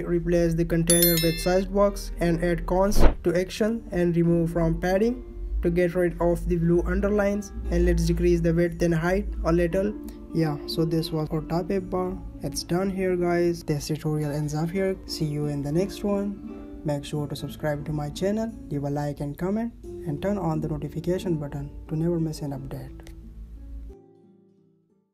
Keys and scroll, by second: 3.3 space, 6.3 ctrl+s, 10.5 ctrl+s.